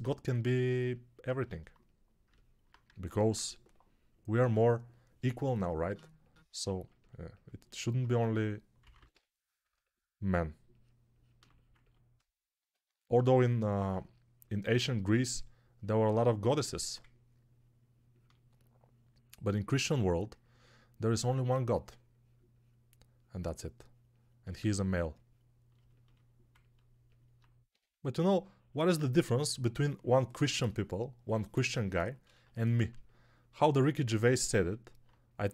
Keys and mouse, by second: 3.2 3, 7.9 1, 8.7 [, 8.8 [, 9.0 [, 27.6 3.